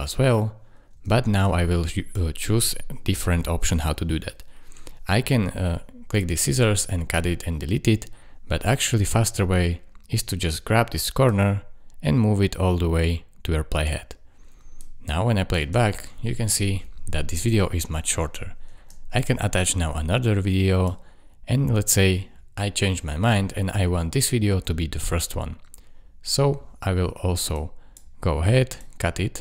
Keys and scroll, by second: 0.9 space, 15.6 space, 18.7 space.